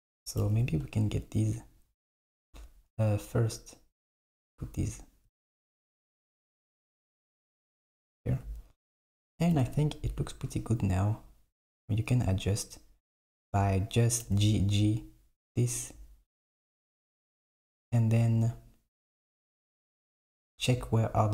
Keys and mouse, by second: 0.5 g, 4.1 click, 7.0 click, 9.6 g, 14.3 g, 16.7 click, 20.5 click.